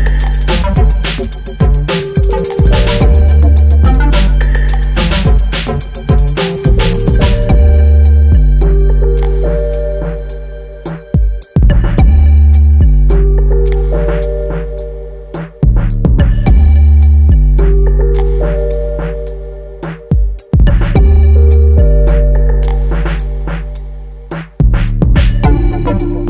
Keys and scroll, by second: 7.5 ctrl+t.